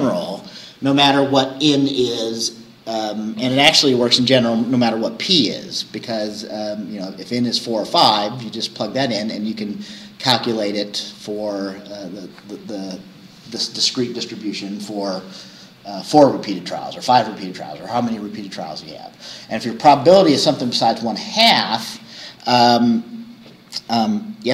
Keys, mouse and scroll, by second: 10.7 scroll down 2, 22.8-23.5 scroll down 4, 24.1-24.5 scroll down 2.